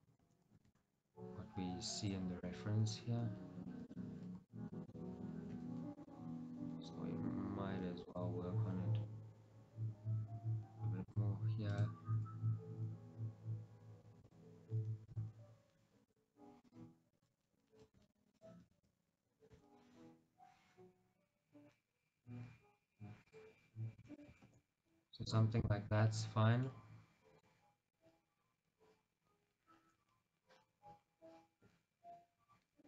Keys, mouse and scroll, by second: 2.2 click, 2.6 g, 4.6 ctrl+right click, 5.7 g, 11.8 click, 12.2 g, 14.4 click, 15.2 click, 15.3 g, 16.2-18.1 drag, 18.1 shift+z, 18.4 click, 18.8 shift+z, 19.6 g, 23.4 click, 25.0-25.8 scroll, 25.8-32.5 shift+middle drag.